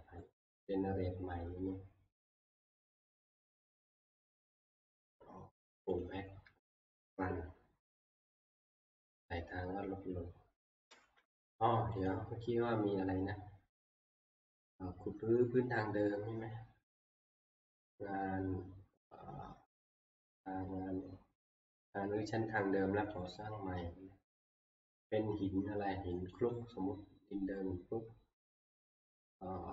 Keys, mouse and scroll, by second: 0.1 click, 2.8 click, 2.8 middle click, 6.0 click, 7.0 click, 10.6 click, 10.9 ctrl+c, 12.1 click, 14.4 middle click, 14.6 middle click, 23.3 click, 26.5 click, 27.5 middle click, 27.5 click.